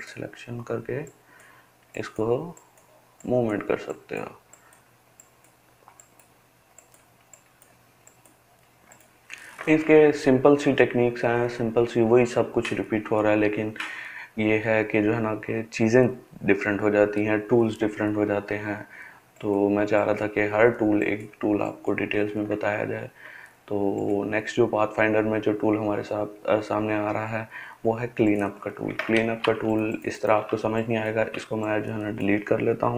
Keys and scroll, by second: 29.2 ctrl+space.